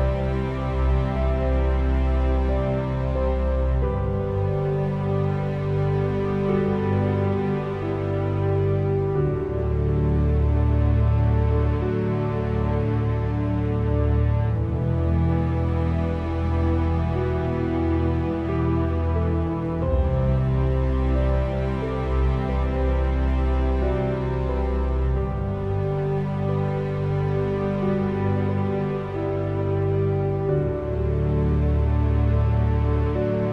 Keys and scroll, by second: 5.8 1, 6.3 8, 6.6 Return, 11.7 5, 12.0 0, 12.6 Return, 30.9 p.